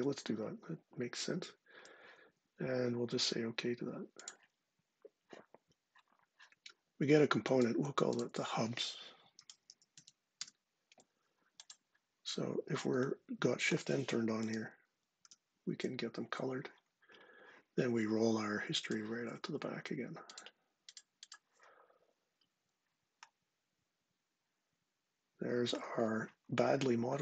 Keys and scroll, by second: 8.9-10.2 typing, 14.2 shift+n, 14.9 shift+n.